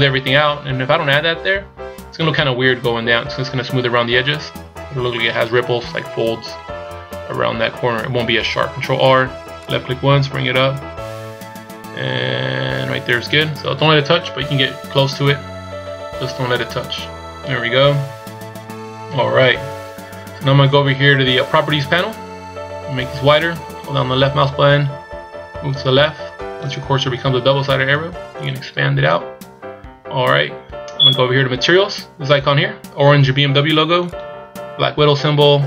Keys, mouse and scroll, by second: 8.7 ctrl+r, 14.2-16.2 scroll up 3, 16.4-17.5 scroll down 1, 17.5-17.8 scroll down 3, 23.2 click, 28.3 click, 34.0 click.